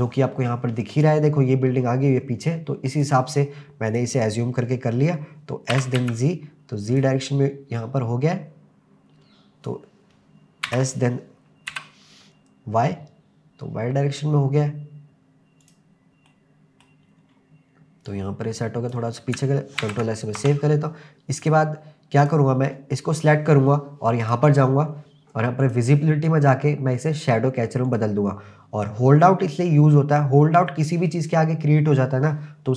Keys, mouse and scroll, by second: 1.0 click, 2.9 click, 3.9 click, 5.7 s, 6.0 z, 7.0 click, 7.8 click, 10.6 s, 11.7 y, 15.6 click, 16.3-17.1 middle drag, 17.1-18.1 scroll down 3, 18.1 click, 19.8 ctrl+s, 20.4 KP_0, 21.4 click, 22.2 click, 23.4 n, 24.2 click, 24.8-25.6 scroll down 2, 25.6 click, 25.6-26.2 scroll down 2, 27.9 click.